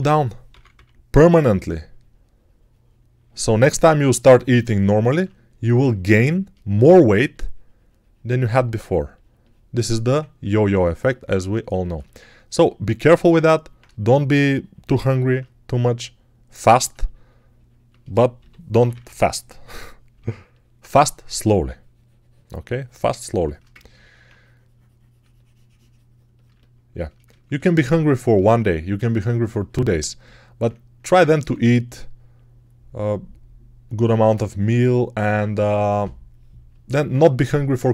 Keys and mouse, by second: 0.4 p, 0.6 [, 6.9 3, 10.3 ctrl+1, 18.2 g, 18.6 ], 18.7 ], 18.9 ], 30.8-34.3 alt+middle drag, 31.3 1, 34.3-37.9 drag, 37.0 ctrl+z.